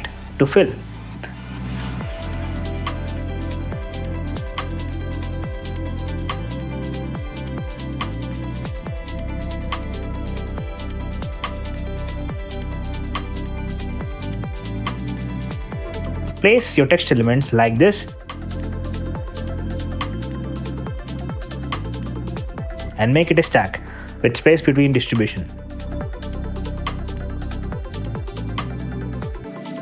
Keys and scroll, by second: 5.5 space, 6.1 d, 6.3 Return, 8.8 f, 9.8 f, 15.2 t, 17.0 Escape, 18.8 super+d, 19.3 super+BackSpace, 19.6 w, 19.8 space, 22.0 t, 22.5 super+z, 23.6 alt+super+Return, 29.3 2, 29.7 super+a.